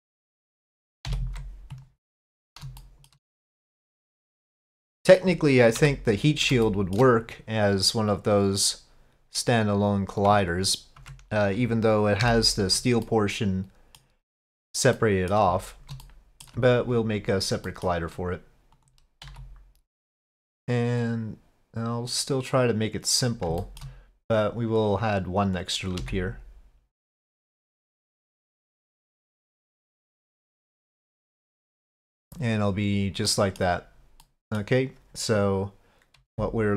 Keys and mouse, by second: 1.1 ctrl+p, 2.8-3.1 shift+drag, 3.9-5.2 drag, 6.6 shift+click, 9.8 click, 13.0-14.0 middle drag, 15.0 middle drag, 16.0-16.4 middle drag, 17.7 middle click, 18.8-20.2 drag, 18.8 s, 20.2 3, 20.2 s, 21.0-23.2 drag, 23.6 shift+middle click, 24.9 click, 25.5 click, 26.0 s, 31.1-32.1 middle drag, 33.3 middle click, 34.3 middle click, 36.3 z.